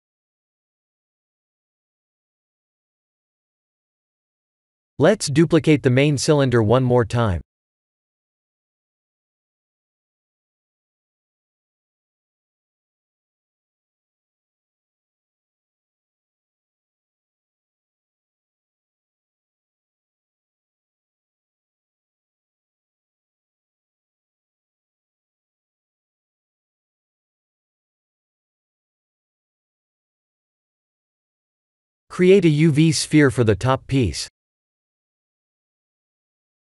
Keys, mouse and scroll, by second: 0.4 KP_1, 1.3 middle click, 2.7 Tab, 3.4 click, 4.0 click, 5.3 shift+d, 8.1 click, 9.7 s, 11.2-12.6 scroll up 6, 12.6 click, 14.3 scroll down 2, 14.9 middle click, 15.6-16.3 scroll up 6, 16.5 shift+middle click, 18.1 s, 19.6-20.4 scroll down 7, 20.4 middle click, 20.9-21.6 scroll down 2, 21.6 s, 26.3 click, 29.1 click, 29.7 middle click, 32.1 click, 33.1 shift+a, 36.4 click.